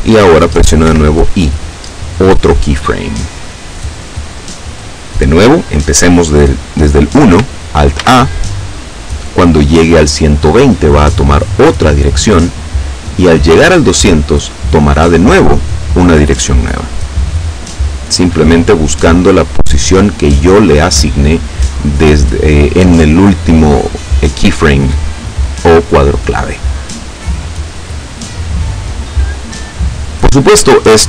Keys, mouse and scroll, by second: 0.5 i, 1.5 click, 3.5 click, 7.8 alt+a.